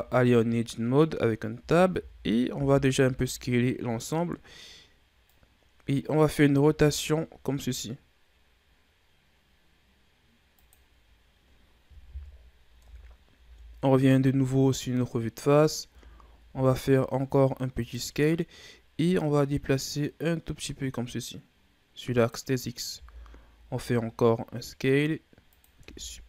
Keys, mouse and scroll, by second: 1.6 a, 2.0 a, 2.5 s, 5.2-6.7 drag, 6.7 r, 12.1 KP_1, 12.8 Tab, 13.4 a, 13.7-14.8 scroll down 4, 14.8-15.9 scroll up 5, 15.9 Tab, 16.4 s, 19.2-22.3 drag, 22.9 s, 25.8 Tab.